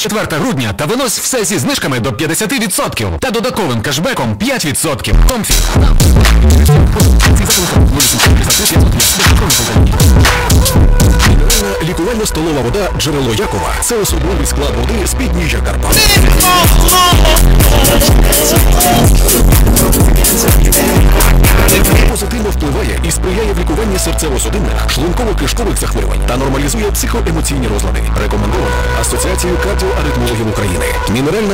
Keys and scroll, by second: 11.8 Page_Down, 22.0 Page_Down.